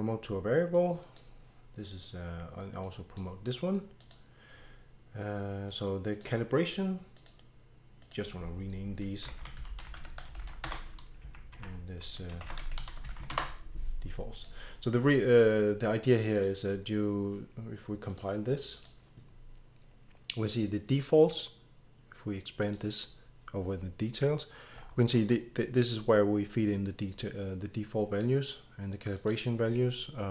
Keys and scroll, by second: 9.0-11.2 typing, 11.5 shift+F2, 12.2-14.1 typing, 15.3-17.3 typing.